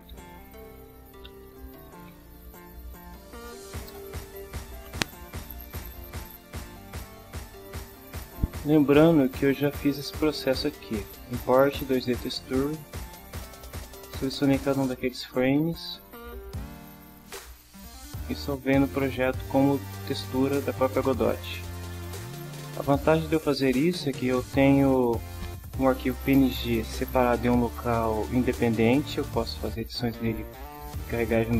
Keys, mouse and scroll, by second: 0.0-4.1 typing, 9.7 click, 12.0 click, 13.1-13.5 drag, 14.4 click, 16.0 click, 17.6 click, 18.6 click, 21.1-21.6 drag.